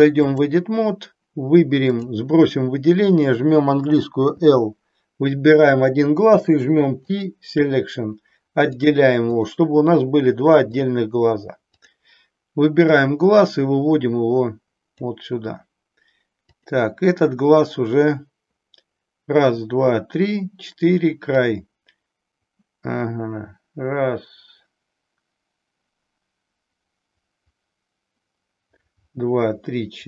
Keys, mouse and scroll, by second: 1.9 click, 4.4 l, 6.2 p, 8.9 click, 10.8 click, 11.7 click, 12.9-15.0 drag, 16.4 click, 21.3-30.0 drag.